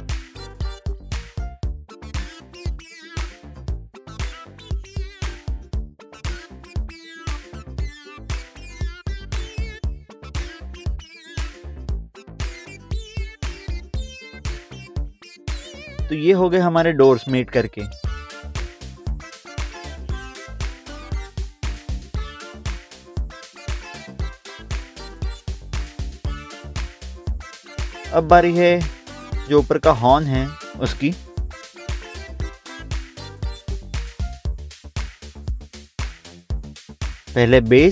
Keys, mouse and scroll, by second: 0.0 click, 1.0 right click, 1.2 scroll down 1, 1.8 middle click, 3.6 click, 4.0 scroll up 1, 5.8 middle click, 6.2 middle click, 6.3 scroll down 1, 7.4 middle click, 7.6 middle click, 7.7 scroll down 1, 9.3 click, 10.5 right click, 10.9 scroll up 1, 12.0 click, 12.3 scroll up 1, 13.2 middle click, 14.5 middle click, 15.2 middle click, 15.9 click, 19.2 click, 19.6 click, 20.6 click, 22.5 click, 22.8 click, 23.0 scroll up 1, 23.5 middle click, 24.2 middle click, 25.0 ctrl+s, 25.7 scroll down 1, 27.3 click, 30.7 click, 31.5 scroll up 1, 31.6 scroll down 1, 32.9 click, 33.2 scroll down 1, 35.0 scroll down 1, 36.0 middle click.